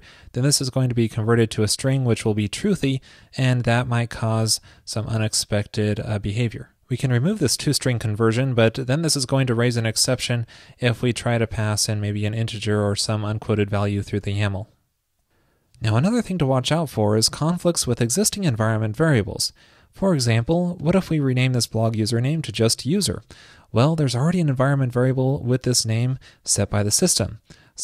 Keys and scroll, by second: 3.3 super+z, 3.4 super+z, 3.6 super+z, 7.6 alt+shift+Right, 9.4 alt+shift+Left, 14.3 super+s.